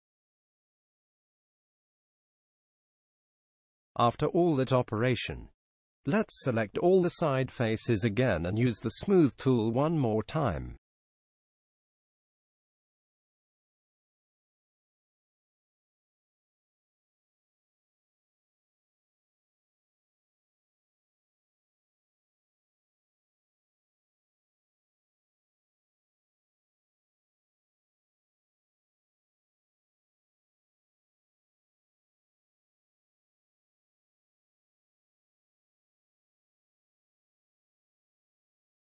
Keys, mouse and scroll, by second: 3.7 KP_1, 8.3 b, 17.2-19.1 middle drag, 23.6-25.4 drag, 28.3-30.2 drag, 35.8 click, 36.4 click, 36.6-37.6 drag.